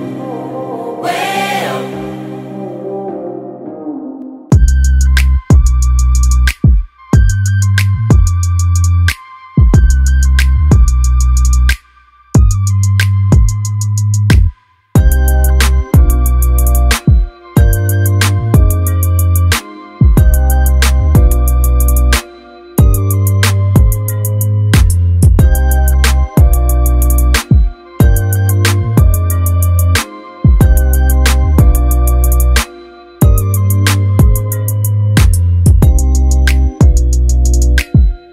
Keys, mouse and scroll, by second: 8.2-10.6 drag, 12.4-13.7 ctrl+click, 15.0 middle click, 18.2-20.7 drag, 20.9-21.9 scroll up 1, 21.9-22.9 click, 23.0-23.3 scroll up 1, 23.8-24.7 scroll down 1, 25.1-26.9 click, 27.0 scroll up 1, 30.0-31.6 drag, 31.9 middle click, 33.0 scroll down 1, 34.0-35.3 scroll up 1, 35.4-36.6 drag, 36.8-37.6 scroll up 1, 37.6-38.0 scroll down 1.